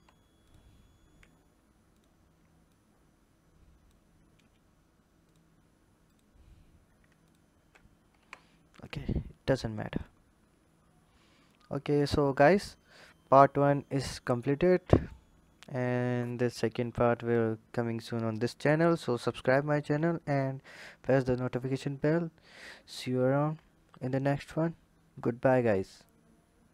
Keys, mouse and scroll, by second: 0.2 click, 1.7 ctrl+click, 2.5 click, 5.0 click, 5.8 click, 7.0 ctrl+click, 8.0 Tab, 8.5 click, 9.3 click, 10.0-11.3 scroll down 2, 11.3 click, 12.0-14.1 scroll down 2, 14.9 click.